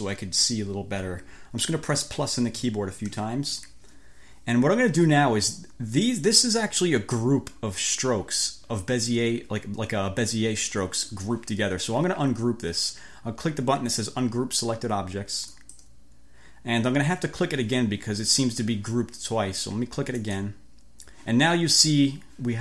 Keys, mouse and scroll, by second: 2.4 =, 15.5 click, 20.3 click.